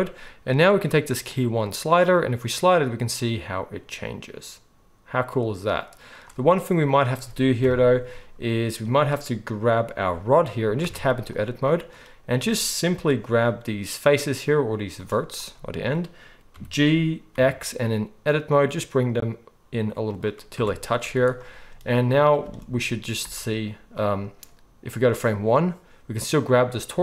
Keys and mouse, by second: 1.8-6.9 drag, 6.9-11.3 middle drag, 7.6 KP_1, 10.8 Tab, 11.3-20.2 drag, 16.5 g, 20.2-23.9 middle drag, 20.5 Tab, 21.0 z, 22.4 space, 23.2 space, 23.9-26.4 drag, 26.4-27.0 middle drag.